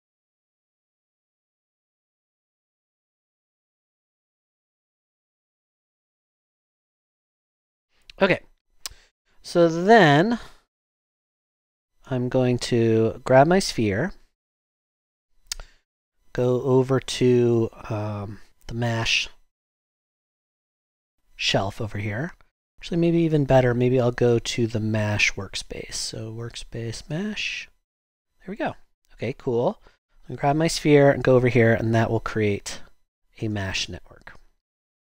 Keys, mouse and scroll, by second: 0.6-2.7 typing.